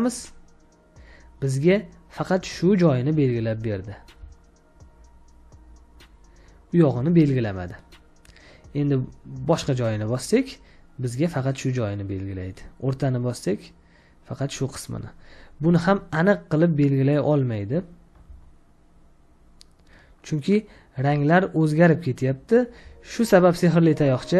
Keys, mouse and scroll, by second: 4.0 space, 4.2 ctrl+click, 15.6 space, 15.8 ctrl+click, 18.2 ctrl+space, 18.4 ctrl+space, 18.6 ctrl+space, 22.6 ctrl+space, 23.0 ctrl+click.